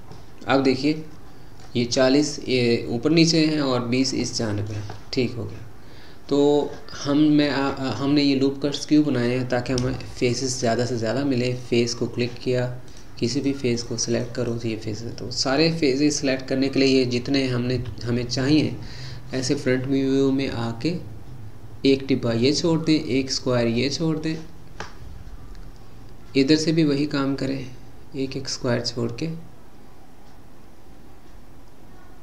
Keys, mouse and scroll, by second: 0.1-3.2 middle drag, 3.4-8.6 middle drag, 8.6-9.9 scroll up 3, 9.9-11.6 shift+middle drag, 11.6 click, 13.4 click, 13.8 click, 14.1 click, 14.4 click, 15.1-17.8 middle drag, 17.8 KP_1, 24.2 click.